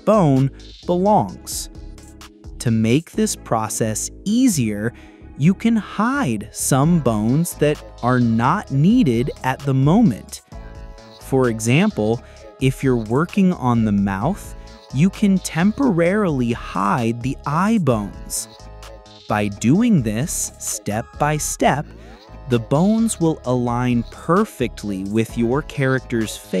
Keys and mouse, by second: 0.0 ctrl+g, 0.2 click, 0.5 click, 0.6 ctrl+g, 1.0 click, 1.2 g, 1.5 ctrl+click, 1.9 click, 2.0 ctrl+g, 2.2 click, 2.7 click, 2.8 ctrl+g, 3.0 click, 3.1 ctrl+g, 3.2 click, 3.4 ctrl+g, 3.5 ctrl+click, 3.7 ctrl+g, 4.3 ctrl+g, 4.5 click, 4.6 ctrl+g, 5.0 click, 5.2 click, 5.4 ctrl+g, 6.0 click, 6.2 click, 6.5 click, 6.5 g, 6.7 g, 6.9 click, 7.1 click, 7.2 g, 7.5 click, 7.8 g, 8.9 click, 9.0 g, 9.5 click, 9.6 g, 9.8 click, 12.2 ctrl+i, 12.4 h, 12.8 h, 13.0 h, 13.0-13.5 h, 13.2 click, 14.7 h, 14.8 click, 15.1 ctrl+z, 15.3 ctrl+z, 16.8-21.0 typing, 17.3 click, 18.1 click, 19.0 ctrl+z, 20.5 click, 21.1 click, 21.3 click, 22.0 click, 22.5 g, 23.3 click, 23.5 g, 23.8 click, 24.0 g, 24.2 click, 24.3 middle click, 24.4 g, 24.7 click, 24.9 g, 25.1 middle click, 26.0 click, 26.0 middle click, 26.1 click, 26.4-26.6 typing.